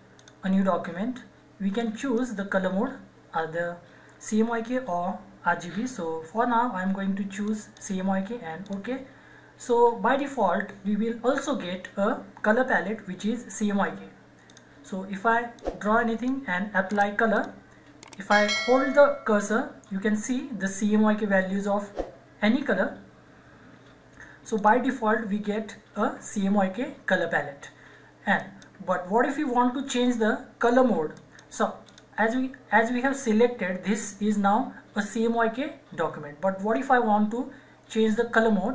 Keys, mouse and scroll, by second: 7.4 click, 14.4 click, 14.9-17.3 drag, 24.5 click, 24.6 click, 28.3 click, 31.1 click.